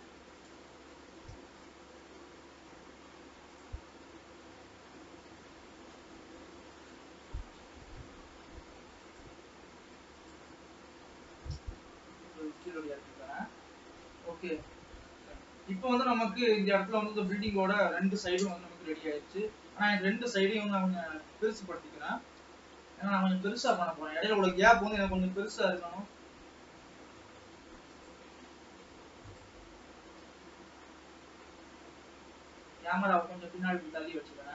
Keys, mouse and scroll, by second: 0.0 a, 1.4 shift+d, 4.1 scroll down 2, 4.3 middle click, 4.9 scroll down 1, 5.1-8.2 middle drag, 9.1-11.4 drag, 11.4 g, 13.1-15.4 middle drag, 15.4-15.9 scroll up 3, 15.9 scroll down 1, 16.3-18.5 middle drag, 18.5 KP_0, 19.5-19.9 scroll up 2, 19.9 alt+a, 21.2 l, 22.2 g, 24.3 alt+a, 25.0 l, 25.7 g, 28.4-28.8 scroll down 2, 28.8 alt+a, 29.1 Tab, 29.4 click, 30.3 g.